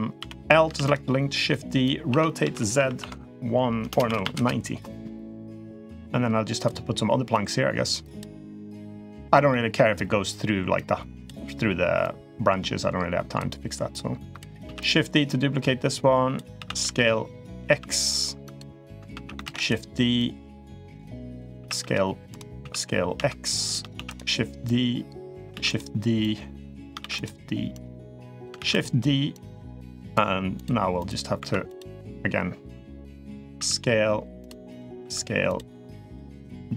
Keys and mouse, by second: 0.0 l, 0.5 shift+d, 1.3-1.6 drag, 1.9 r, 5.6 s, 7.1 click, 8.7 click, 9.3 middle click, 10.5-11.0 drag, 11.8 click, 13.7 click, 14.4 shift+d, 15.1-16.1 drag, 16.3 s, 19.2 shift+d, 20.0-21.1 drag, 21.4 s, 22.4 s, 23.7 shift+d, 24.5 click, 26.0-26.7 drag, 27.5-28.2 drag, 29.1-29.9 drag, 30.3 click, 30.8 click, 31.1 2, 33.3 s, 34.5 click, 34.8 s, 35.8 click, 36.1 h.